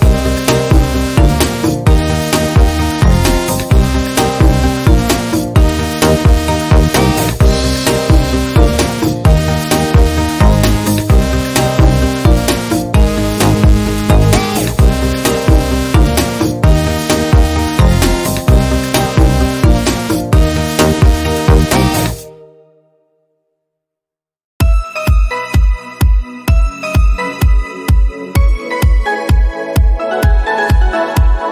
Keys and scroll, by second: 3.9 ctrl+g, 7.8 Down, 7.9 Down, 8.0-8.7 Down, 11.6 ctrl+z, 14.4-15.3 typing, 15.8 Right, 16.1 Up, 16.3 Down, 17.0 Left, 17.6 Left, 17.6 Right, 18.1 Right, 18.7 Left, 19.1 Left, 19.1 Up, 19.6 Left, 20.0 Right, 22.8 Down, 22.9 Down, 23.5 Down, 28.4 Right, 28.4 Down, 29.3 Up, 29.8 Up, 30.1 Down.